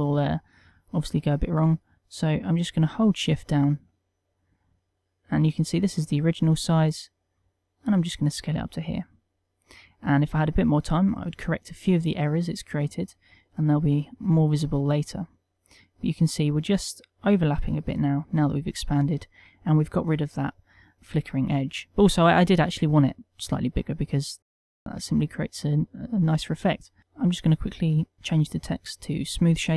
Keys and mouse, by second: 10.5 middle click, 12.3 middle click, 14.2 Tab, 14.7 middle click, 18.1 middle click, 19.3 middle click, 24.2 middle click, 25.6 ctrl+middle click, 25.9 middle click, 26.7 ctrl+middle click, 27.0 click, 28.7 t.